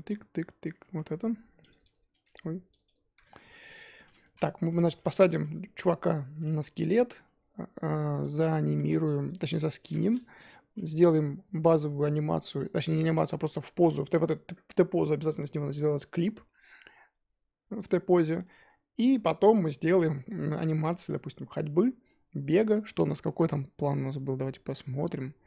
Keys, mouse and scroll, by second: 0.1 Down, 0.3 Down, 0.6 Down, 0.8 Up, 2.7 click, 2.8 click, 3.7-5.2 drag, 5.5 Up, 5.8 Down, 6.4 Down, 6.9 Down, 7.2 Down, 8.3 click, 9.4-10.9 drag, 11.4 Down, 11.8 Down, 12.2 Down, 12.5 Down, 13.1 Down, 17.8 click, 18.1-19.4 middle drag, 19.4-19.8 scroll down 3, 19.8-20.3 middle drag, 20.3-20.6 scroll up 3, 20.6-23.0 scroll down 1.